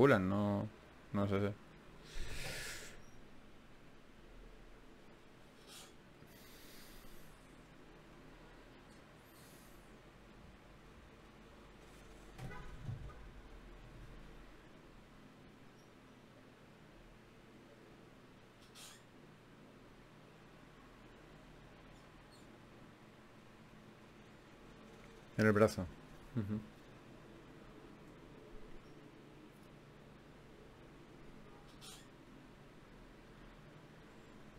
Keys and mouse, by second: 1.2 ctrl+Tab, 2.0-3.4 drag, 3.4 f, 5.1 click, 8.3-10.3 right drag, 11.3 ctrl+Tab, 13.9 g, 14.5 click, 14.5 g, 15.5 click, 17.5 KP_1, 18.5 z, 19.3 z, 20.9-22.1 drag, 22.1 shift+Tab, 26.3 e, 29.2-31.8 drag, 30.1 w.